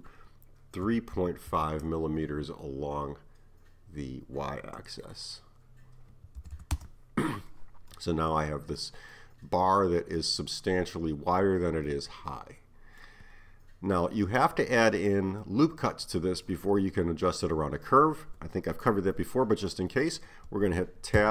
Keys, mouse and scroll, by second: 6.6 m, 7.9-18.5 middle drag, 19.7-21.3 middle drag.